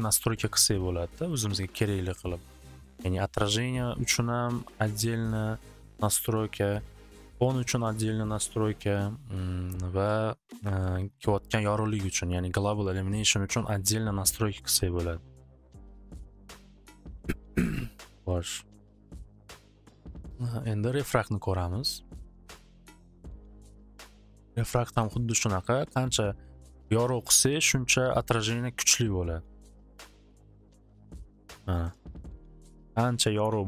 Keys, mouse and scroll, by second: 2.7 click, 5.7-7.4 drag, 7.4 right click, 15.7-16.9 drag, 20.9 click, 22.4 click, 23.1 click, 24.1 click, 24.2-25.2 typing, 24.2 click, 32.4 click, 32.5-33.4 typing, 32.6 click, 33.4 Return.